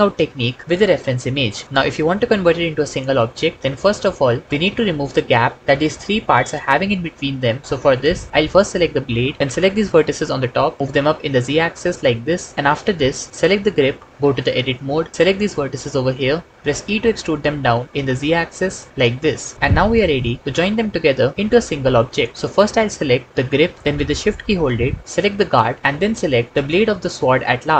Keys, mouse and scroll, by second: 3.5 KP_1, 8.9 Tab, 10.8 g, 10.9 z, 12.2 click, 12.5 Tab, 14.2 Tab, 16.5 e, 17.8 z, 19.5 alt+z.